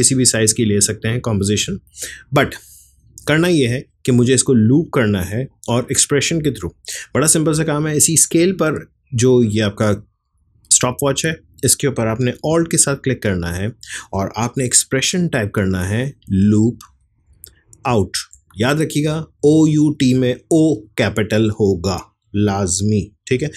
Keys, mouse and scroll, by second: 0.1-1.0 typing, 2.8-5.7 drag.